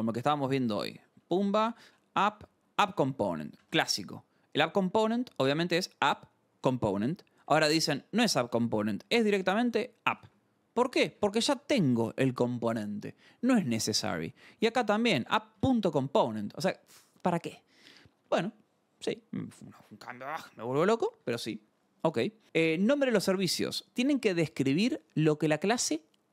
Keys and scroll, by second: 0.0-10.9 typing, 0.7 Return, 3.6 Return, 11.9 shift+v, 12.9 Escape, 14.2 l, 15.3-16.1 typing, 16.1 Escape, 22.4 Escape, 24.0 scroll, 25.4 scroll.